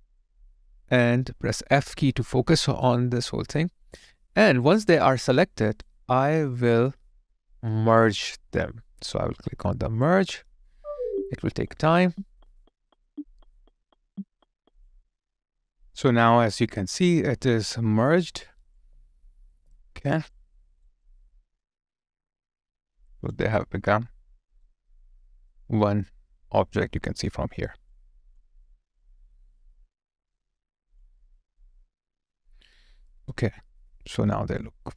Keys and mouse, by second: 1.9 f, 2.9 alt+click, 4.1 alt+middle click, 4.5 alt+click, 5.3 alt+middle click, 5.9 alt+click, 6.5 alt+right click, 6.8 alt+middle click, 18.4 alt+click, 20.7 alt+right click, 21.1 alt+click, 23.6 alt+right click, 24.9 alt+middle click, 25.9 alt+right click, 28.0 alt+click, 28.7 alt+middle click, 29.3 alt+click, 31.2 alt+right click, 31.8 alt+middle click, 32.8 alt+right click, 33.5 alt+click.